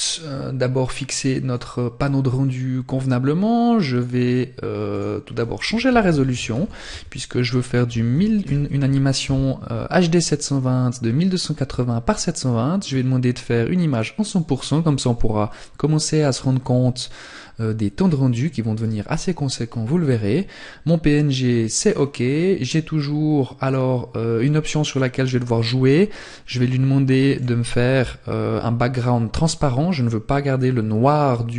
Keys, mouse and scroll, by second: 0.4 click, 3.8 click, 11.2 click, 18.4 scroll down 1, 20.7-21.1 scroll down 4, 26.2 click.